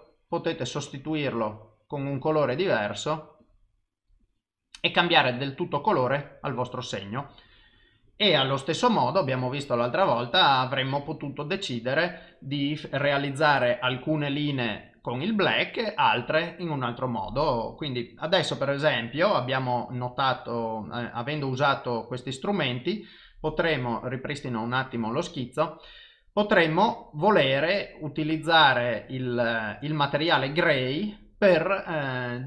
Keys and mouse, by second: 9.2 click, 24.6 click, 31.2 click.